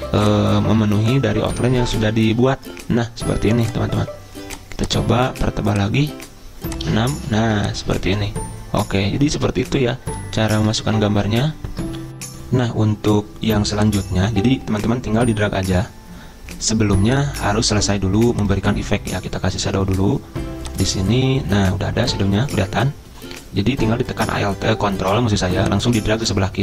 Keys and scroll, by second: 12.3 F9.